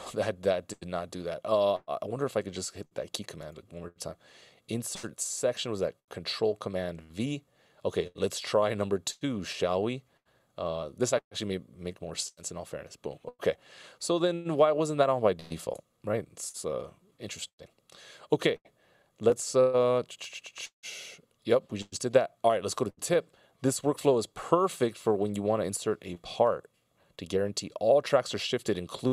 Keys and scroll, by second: 0.3 super+z, 15.9 super+z, 17.3 shift+super+z.